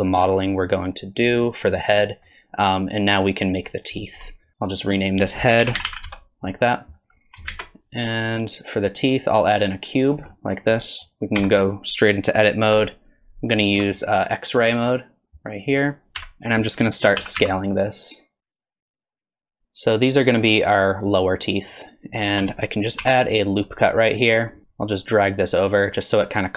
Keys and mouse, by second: 2.1 middle click, 4.0 shift+middle drag, 4.7 click, 4.9-6.5 drag, 7.5 shift+a, 10.3 middle drag, 10.8 middle click, 11.4 Tab, 14.7 click, 15.9 click, 16.1 n, 16.2 KP_1, 17.2 s, 18.6 s, 18.7 click, 18.8 shift+middle click, 18.9 click, 19.0 KP_3, 19.1 alt+z, 19.1 s, 19.3 click, 19.4 shift+middle click, 19.6 click, 23.0 ctrl+r, 24.7-26.0 drag.